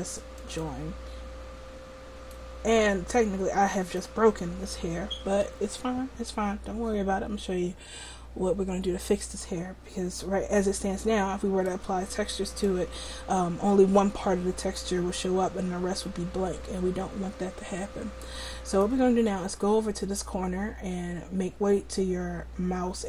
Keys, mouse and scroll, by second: 12.5-20.3 middle drag.